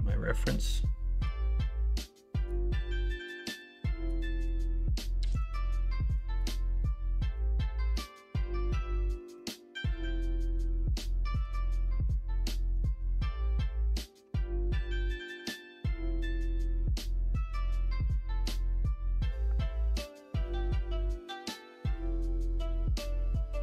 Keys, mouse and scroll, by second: 9.3-11.4 middle drag, 12.2 middle click, 13.0 middle click, 13.9 middle click, 14.2 Tab, 14.6 shift+a.